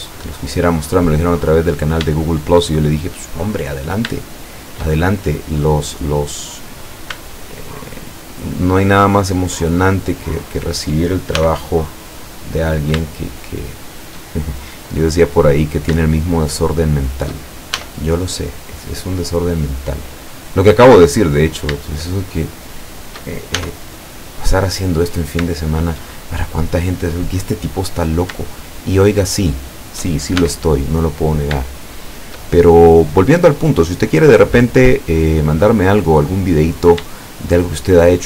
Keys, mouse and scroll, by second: 1.2 click, 1.8 scroll down 1, 2.8-4.1 shift+middle drag, 4.3-5.4 shift+middle drag, 5.4 click, 6.9 right click, 8.6 shift+right click, 9.3 shift+right click, 9.7 shift+right click, 10.1 shift+right click, 10.6 shift+right click, 11.4 shift+e, 12.7 click, 13.1-14.3 shift+middle drag, 15.0 right click, 16.1 shift+right click, 16.6 shift+right click, 17.0 shift+right click, 17.8 shift+e, 18.8 click, 21.5 shift+right click, 22.1 shift+right click, 22.5 shift+right click, 22.9 shift+right click, 23.6 shift+e, 24.7 click, 25.6-26.2 shift+middle drag, 28.1 right click, 28.8 shift+right click, 29.2 shift+right click, 29.7 shift+right click, 30.4 shift+e, 31.3 click, 31.7-34.2 shift+middle drag, 34.3-35.7 middle drag, 36.8 shift+right click, 37.2 shift+right click, 37.6 shift+right click.